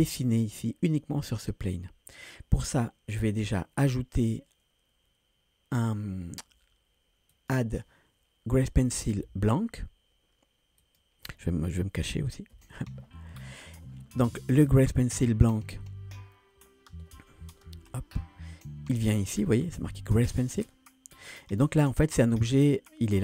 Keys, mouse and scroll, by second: 3.8-6.9 drag, 7.3-11.0 drag, 12.7 [, 14.7 click, 17.8 BackSpace, 21.6 scroll down 2, 22.2-22.9 scroll down 1.